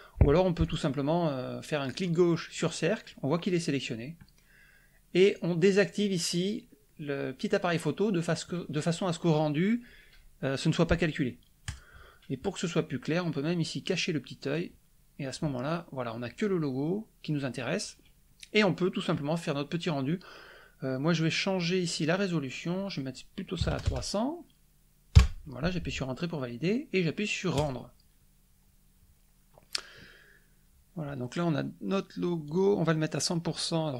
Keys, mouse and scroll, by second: 0.6 click, 1.9 click, 5.2 click, 11.6 click, 14.3 click, 21.8 click, 23.5 KP_3, 23.7 KP_0, 25.1 KP_Enter, 27.5 click, 32.4 click.